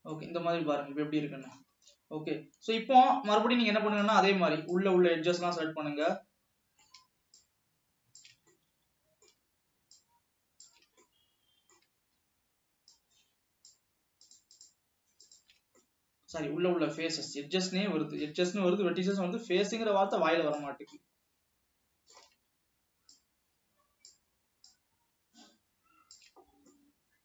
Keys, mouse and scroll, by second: 0.3-2.2 middle drag, 2.2 ctrl+s, 2.4 Tab, 2.7 scroll up 1, 2.9-4.4 middle drag, 4.4 click, 5.0 click, 5.9 scroll down 2, 6.3-7.6 middle drag, 7.6 shift+click, 8.6-10.1 middle drag, 10.1 shift+click, 11.1-13.1 middle drag, 13.1 shift+click, 14.3 shift+click, 14.8 shift+click, 15.3 shift+click, 15.9-17.9 middle drag, 17.9 shift+click, 19.3 shift+click, 21.3-23.3 middle drag, 23.3-24.3 shift+drag, 24.8 shift+click.